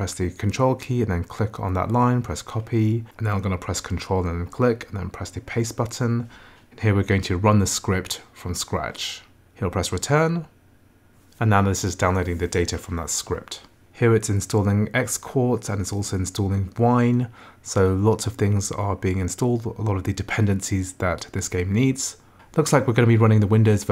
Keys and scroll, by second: 9.9 Return.